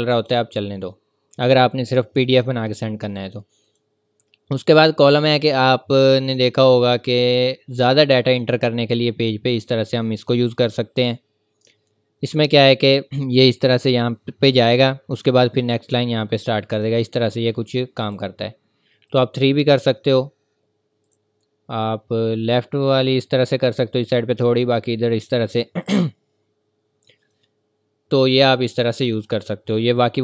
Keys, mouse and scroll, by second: 3.7 click, 7.0 click, 7.8-8.3 scroll up 1, 8.3 scroll down 1, 9.6 scroll up 1, 13.0 click, 20.3-20.8 scroll up 1, 21.0 click, 23.1 scroll up 1, 25.5 click.